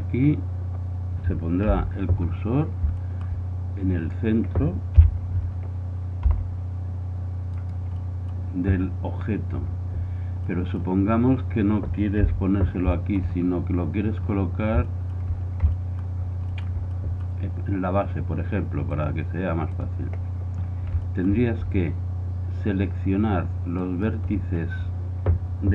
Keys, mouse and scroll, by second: 1.7 KP_1, 5.1 KP_7, 6.3 r, 12.3 KP_1, 18.5 middle click, 19.8-21.0 drag, 21.0-23.0 middle drag, 23.8 right click.